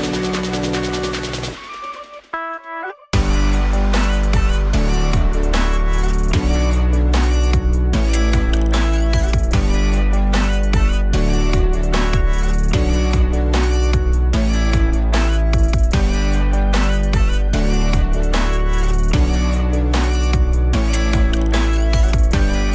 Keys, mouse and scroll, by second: 0.4 click, 2.0 click, 12.5 click, 13.9-16.4 drag, 16.9 click, 17.4 click, 18.0 middle click, 18.6-19.3 scroll up 4, 19.3 middle click, 20.1-21.2 drag, 21.2 KP_0.